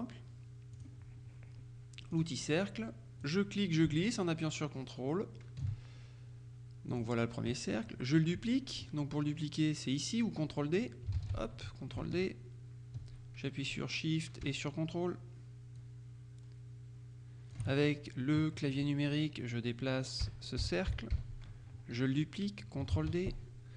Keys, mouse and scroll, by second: 0.8 click, 2.2 click, 3.3-6.2 drag, 7.0 click, 11.3 ctrl+d, 12.3-18.1 ctrl+drag, 20.3 Down, 23.0 ctrl+d.